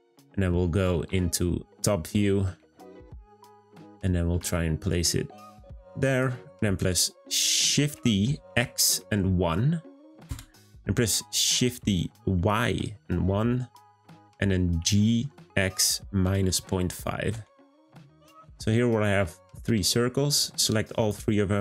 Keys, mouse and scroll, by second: 2.7-3.7 shift+middle drag, 3.7-4.3 scroll up 2, 4.3 g, 7.7 shift+d, 11.6 shift+d, 18.4-19.9 scroll down 1, 19.9 click.